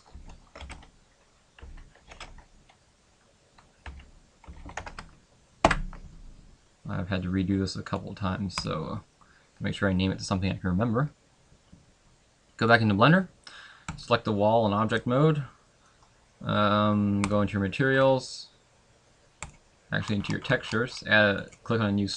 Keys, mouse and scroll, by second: 14.0 right click, 15.0 middle click.